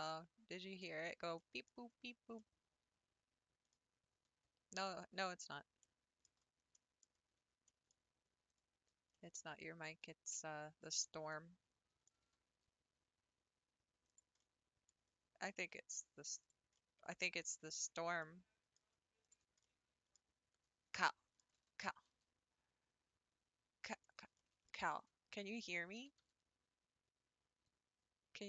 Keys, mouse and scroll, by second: 1.8 Tab, 1.9 scroll down 4, 2.4-3.8 middle drag, 3.8-4.3 scroll up 3, 4.3 Tab, 4.8 Tab, 5.8 middle click, 6.3 Tab, 6.6 scroll up 1, 6.8 middle click, 7.2-7.7 scroll up 4, 7.7 middle click, 8.6 click, 9.1-10.9 middle drag, 10.9 shift+click, 11.3 middle click, 12.2 g, 14.4-16.5 middle drag, 16.5 click, 16.8-19.3 middle drag, 19.3 shift+Left, 19.7-21.6 middle drag, 21.6 g, 24.4 shift+middle click, 25.3 scroll up 2, 26.0 g.